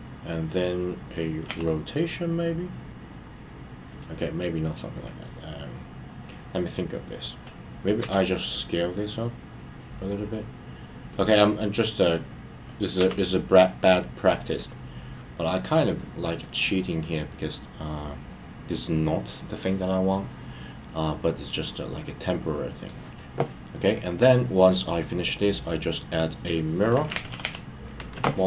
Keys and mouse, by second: 11.1 click, 16.3 click, 16.7-22.8 middle drag, 25.5-28.1 drag.